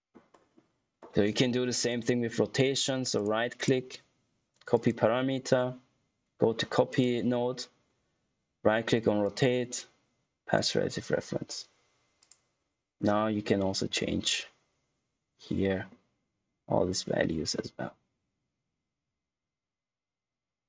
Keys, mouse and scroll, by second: 1.7 click, 2.5 right click, 4.7 click, 6.8 click, 9.2 right click, 10.5 click, 13.3 middle click, 14.2 middle click, 17.8 middle click.